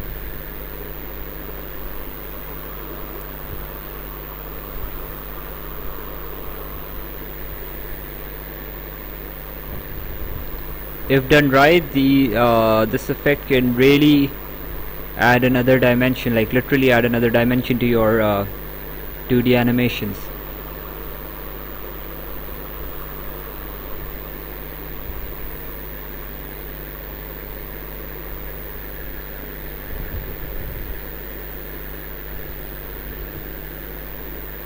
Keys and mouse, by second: 6.8 right click, 8.5 click, 10.2 click, 13.7 click, 17.5 right click, 19.3 click, 23.7 click, 26.8 click, 29.2 click, 31.2 click, 33.5 right click.